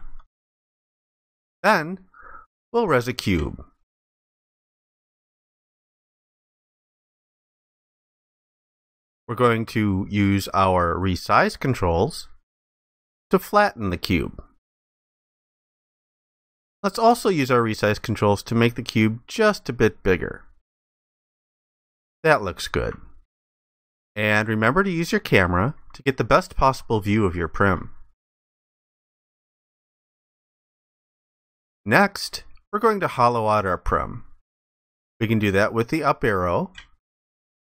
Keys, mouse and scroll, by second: 6.3 ctrl+alt+click, 12.5 ctrl+shift+click, 18.2 ctrl+shift+click, 23.4 alt+click, 26.0 alt+click.